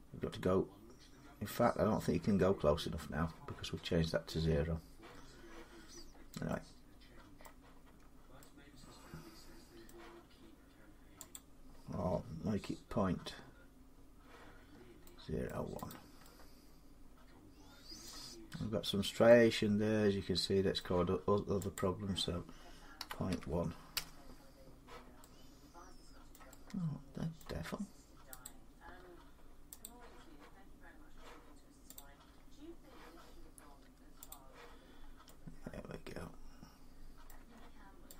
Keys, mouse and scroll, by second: 0.9 scroll, 1.5 scroll, 2.0 scroll, 5.5 middle click, 5.6 middle click, 5.6 middle click, 5.9 middle click, 5.9 middle click, 6.0 middle click, 6.8-7.3 scroll, 7.9 scroll, 9.6 scroll, 11.1 click, 14.5 scroll, 14.5 middle click, 14.7 middle click, 15.3 middle click, 15.7 click, 17.3 scroll, 17.8 middle click, 18.1 scroll, 18.8 scroll, 19.4 scroll up 4, 20.5 middle click, 21.5 click, 22.8 typing, 23.7 Return, 26.1 middle click, 26.3 scroll, 27.2-27.5 scroll, 27.5 scroll up 4, 28.6 click, 28.7-29.6 scroll down 4, 28.8-29.6 scroll up 2, 29.6 click, 31.7 click, 34.1 click, 34.7 middle click, 34.8 middle click, 36.0 scroll up 4, 37.0 middle click, 37.2 Tab, 38.0 click, 38.0-38.1 scroll down 4.